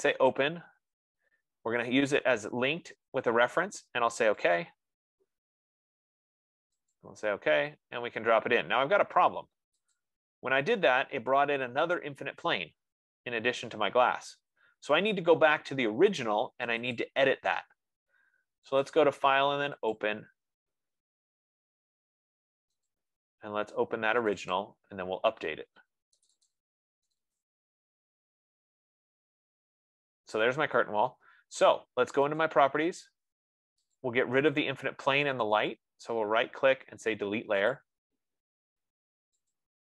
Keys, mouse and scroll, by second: 0.3 click, 4.9 click, 7.3 click, 10.4 click, 17.5 click, 19.3 click, 20.4 click, 23.4 click, 24.8 click, 25.0 click, 26.6 click, 26.9 click, 27.7 click, 32.8 click, 34.5 click, 36.0 right click, 38.2 click.